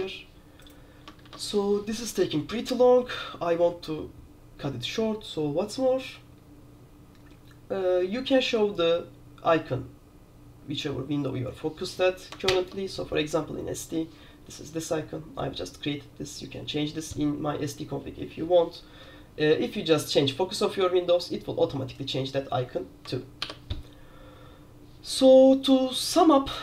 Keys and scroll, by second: 0.0 super+q, 1.3 super+q, 12.6 super+Return, 23.5 super+q.